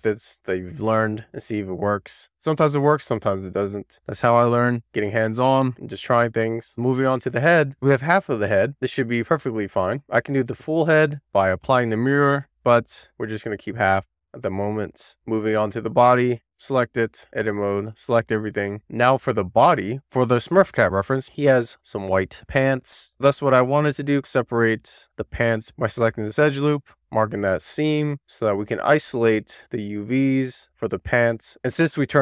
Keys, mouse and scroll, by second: 0.0 click, 1.6 click, 2.4 click, 3.2 scroll down 1, 3.4 middle click, 5.1 middle click, 6.2-7.1 scroll down 1, 7.1 Tab, 7.2 click, 7.8 scroll down 2, 8.0 middle click, 8.9 Tab, 9.4-9.9 scroll up 1, 9.9 scroll up 3, 10.2-10.9 scroll down 2, 10.9-11.2 scroll up 1, 11.2-11.7 scroll down 1, 11.7 click, 12.1 a, 12.9-13.7 scroll down 1, 13.9-14.4 scroll down 1, 14.4 Tab, 15.0 /, 15.1 click, 15.3 Tab, 19.9 a, 20.3 a, 21.0-21.5 scroll up 1, 21.5 click, 22.2 middle click, 22.5 scroll up 1, 22.8 middle click, 23.8 click, 23.9 middle click, 24.1 alt+shift+click, 24.2 middle click, 24.8 alt+shift+click, 25.0 middle click, 25.7 alt+shift+click, 25.8 middle click, 26.4 alt+shift+click, 26.6 middle click, 27.2-32.2 right drag.